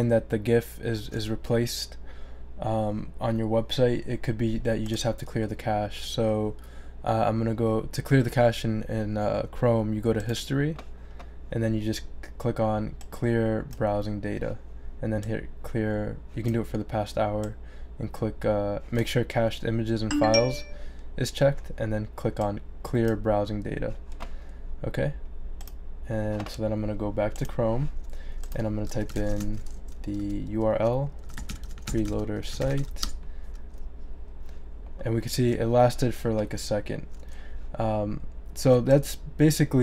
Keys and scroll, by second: 28.7-33.3 typing.